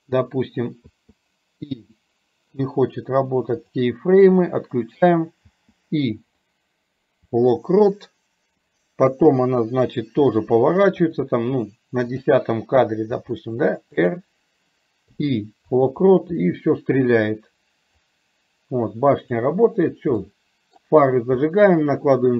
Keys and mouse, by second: 12.3 click, 16.4-18.2 middle drag, 18.2-20.2 drag, 20.2 middle click, 21.9 middle click.